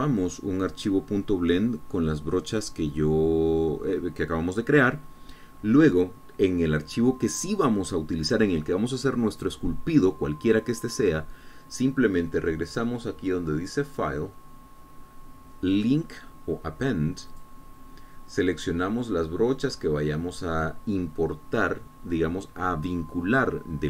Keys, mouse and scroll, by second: 15.3 click, 18.7 click.